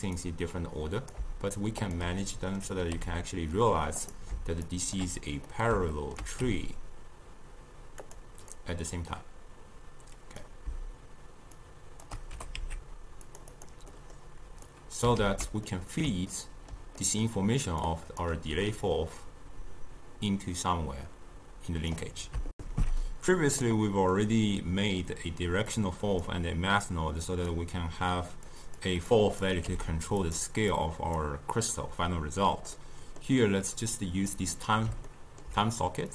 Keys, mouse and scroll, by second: 0.3-2.0 drag, 2.3 middle click, 3.0 g, 4.8 shift+click, 5.6 middle click, 6.5 g, 8.6-11.7 drag, 12.4 g, 13.6 click, 14.0-14.8 middle drag, 14.8-15.3 drag, 15.3 ctrl+x, 15.8-17.9 middle drag, 17.9 click, 18.9-22.0 drag, 22.6 alt+shift+q, 24.2-25.8 middle drag, 25.8 click, 26.9 click, 28.6 click, 29.1-29.7 drag, 29.7 g, 30.8 click, 32.8-36.1 middle drag.